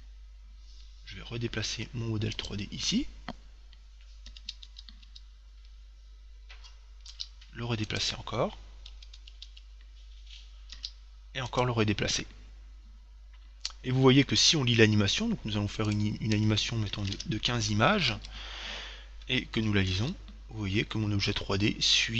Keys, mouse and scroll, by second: 1.8 g, 2.7 click, 4.6 Right, 5.3 Right, 7.4 g, 8.3 click, 9.1 Right, 10.5 Right, 11.1 g, 11.8 click, 16.1-17.9 drag, 20.2 alt+a.